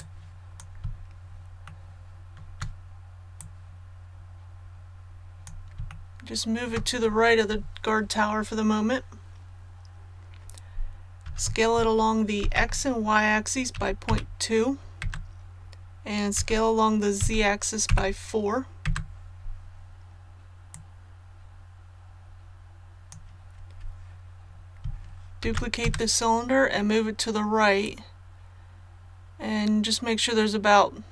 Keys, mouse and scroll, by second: 3.3-5.7 drag, 5.9 shift+middle click, 11.2 s, 12.4 shift+z, 13.7 KP_Decimal, 14.0 KP_2, 16.3-17.8 typing, 20.7-23.9 drag, 25.4 shift+d, 27.8-31.1 drag.